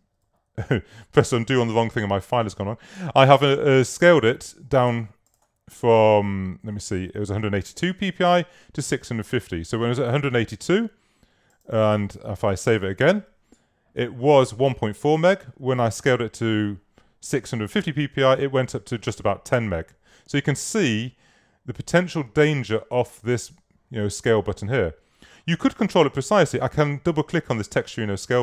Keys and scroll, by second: 4.9 super+z, 13.1 super+s.